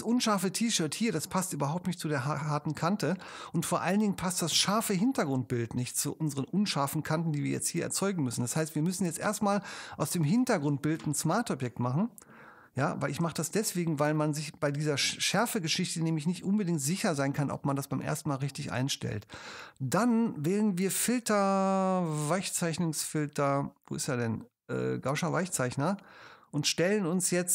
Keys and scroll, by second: 3.2 space.